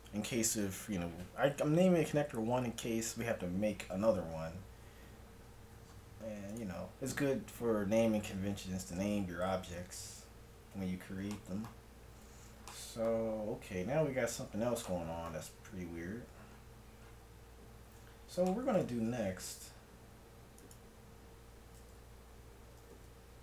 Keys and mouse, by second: 4.5-6.5 middle drag, 6.5-8.3 right drag, 8.4-9.9 middle drag, 9.9 KP_1, 18.1 middle click, 20.6-22.2 right drag, 22.8 g.